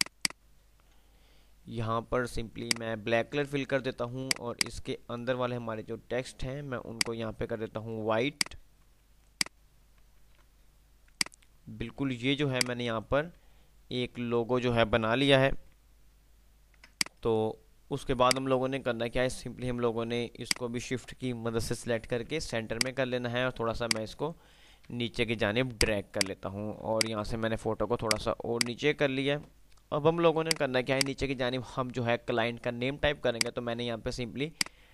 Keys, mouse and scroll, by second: 2.3-3.6 typing, 7.1 click, 8.3 ctrl+click, 9.0 ctrl+r, 9.5 ctrl+click, 10.1 ctrl+r, 11.3 click, 11.5 F3, 12.8 F2, 12.8-13.6 click, 13.5 F3, 16.0 click, 20.1 shift+click, 22.1 c, 22.8 click, 25.1 F3, 25.6-28.3 drag, 27.3 ctrl+click, 28.3 F2, 29.0 F2, 29.6 F3, 30.3 click, 30.6 F2, 30.6 click, 31.1 F2, 33.3 click.